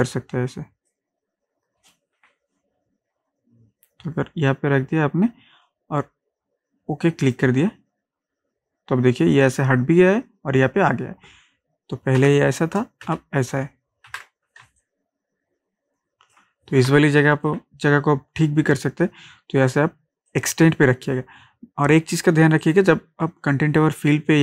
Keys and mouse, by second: 2.9 Down, 7.3 click, 12.2 ctrl+z, 13.1 ctrl+shift+z, 14.1 ctrl+d, 14.7 ctrl+space, 14.8 ctrl+click, 15.2 ctrl+space, 16.9 ctrl+click, 17.4 ctrl+space, 20.3 click, 22.6 click.